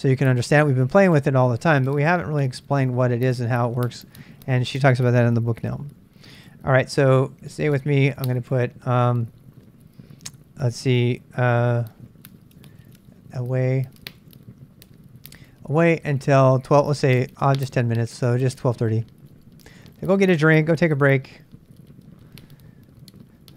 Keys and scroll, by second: 7.2-8.0 typing, 9.1-9.8 typing, 12.0-15.6 typing, 12.6 ctrl+[, 17.2-23.5 typing.